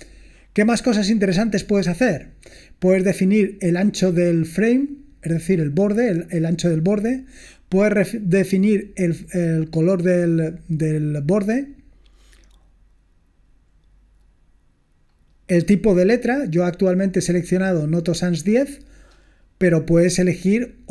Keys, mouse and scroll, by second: 1.5-2.2 scroll down 2, 2.2-3.3 scroll down 1, 11.3 scroll down 1, 13.0 scroll down 1, 14.5-15.7 scroll down 2, 15.7-16.2 scroll down 1, 16.2 scroll down 1, 19.3-20.4 scroll down 2.